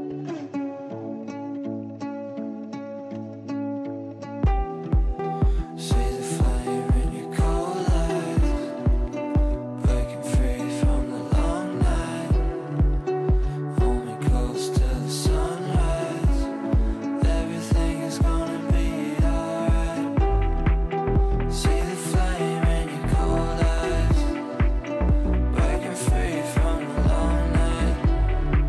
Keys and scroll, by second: 2.8 Delete, 12.8 8, 13.8 ctrl+z.